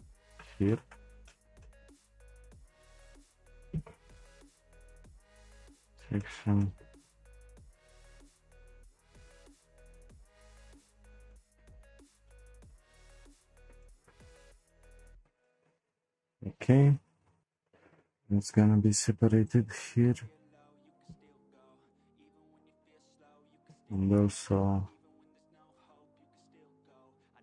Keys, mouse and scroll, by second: 0.7-2.6 middle drag, 2.6 shift+click, 3.0 shift+click, 3.8 p, 5.8-6.2 scroll down 2, 6.2-10.1 shift+middle drag, 11.3-11.9 shift+middle drag, 11.9-12.2 scroll down 1, 12.2-18.5 shift+middle drag, 19.4 click, 19.5 c, 21.2 p, 22.8 click, 23.6 c.